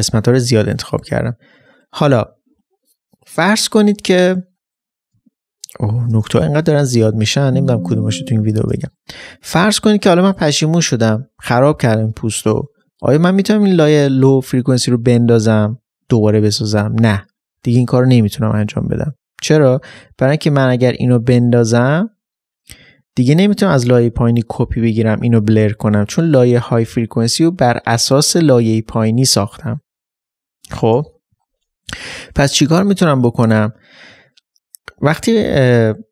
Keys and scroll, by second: 31.1 ctrl+j, 31.3 ctrl+z, 32.4 ctrl+z.